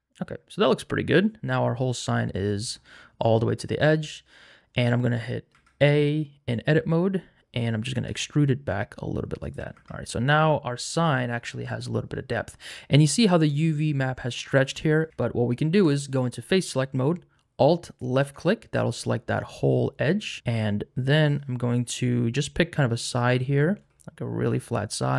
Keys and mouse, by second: 5.5 Tab, 7.9 e, 9.4 shift+click, 9.7 Tab, 15.1 Tab, 15.8 3, 17.8 alt+click, 23.5 shift+middle click.